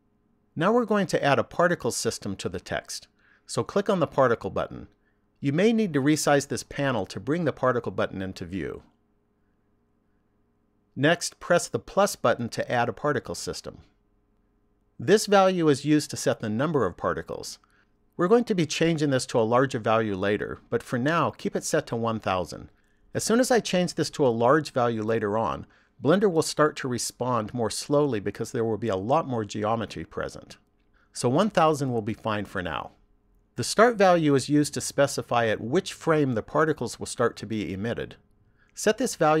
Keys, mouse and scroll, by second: 5.1 click, 10.1 click, 12.9 click, 38.6 click.